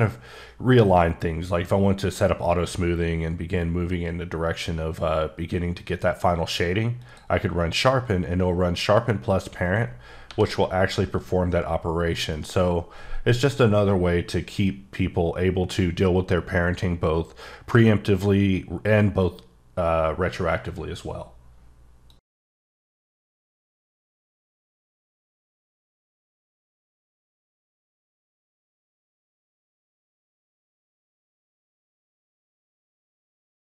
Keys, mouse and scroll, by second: 7.0 click, 9.8-10.3 scroll down 1, 10.3 g, 12.3 right click.